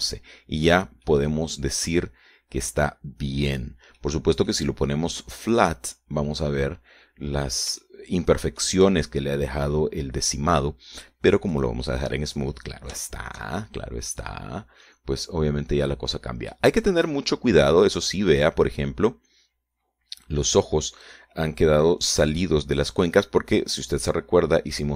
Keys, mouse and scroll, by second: 1.4 Escape, 2.2 scroll down 2, 2.6 click, 3.0 middle click, 5.0 right click, 5.6 middle click, 7.0 click, 7.7-8.1 scroll up 1, 9.4 shift+middle click, 13.1 click, 13.6-14.6 scroll down 3, 14.6 shift+middle click, 15.1-15.4 shift+scroll up 2, 15.8-16.3 scroll up 2, 16.8 scroll down 2, 17.4 middle click, 18.3 scroll up 2, 18.4-19.4 middle drag, 19.8 scroll up 2, 24.0 click, 24.2 middle click.